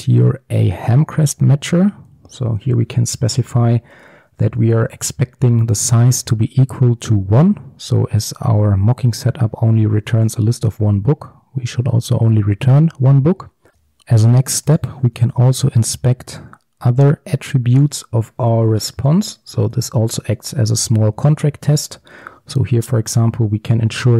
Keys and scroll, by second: 2.0 Return, 13.7 ctrl+x, 15.2 ctrl+d.